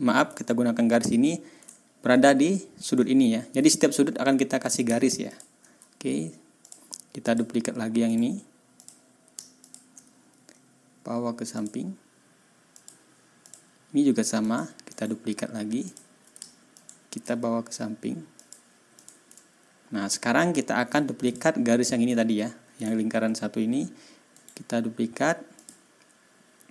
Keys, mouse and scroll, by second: 0.5 ctrl+scroll up 2, 1.7-2.0 ctrl+scroll up 2, 3.0 ctrl+scroll down 2, 5.3 shift+click, 6.6 click, 7.2 click, 8.1 right click, 8.8 click, 9.6 shift+click, 11.5 click, 12.7 click, 13.4 click, 14.4 click, 14.9 right click, 15.8 click, 16.7 shift+click, 18.3 click, 18.9 click, 19.3 ctrl+scroll down 2, 19.8 ctrl+scroll up 2, 20.2 ctrl+scroll down 2, 20.6 ctrl+scroll up 2, 21.2 ctrl+click, 24.3 scroll up 2, 24.5 click, 25.5 click.